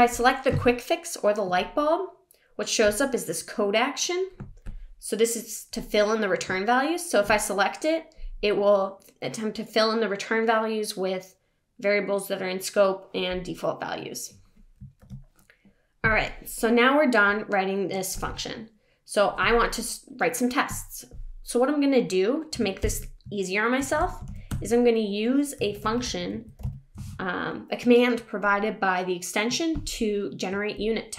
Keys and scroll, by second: 15.0 super+s, 22.9 shift+super+p.